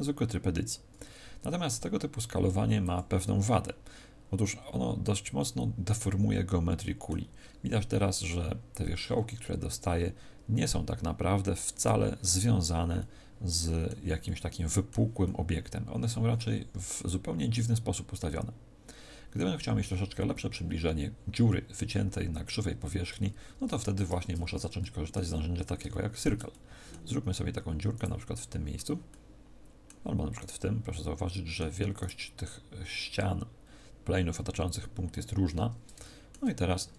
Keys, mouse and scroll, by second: 2.9 click, 3.6 middle click, 7.3-9.1 scroll up 1, 9.5-12.9 scroll up 4, 12.9 middle click, 14.2 middle click, 15.2 middle click, 16.7 z, 17.0 middle click, 19.7 middle click, 23.1 Tab, 23.7 z, 24.2 Tab, 24.7 middle click, 25.4-26.5 scroll down 5, 25.9 shift+middle click, 26.5 middle click, 27.9 right click, 28.3 middle click, 29.1 middle click, 30.3 right click, 30.9 middle click, 31.9 right click, 35.4-35.9 scroll up 1, 35.9 shift+middle click, 35.9 scroll up 2.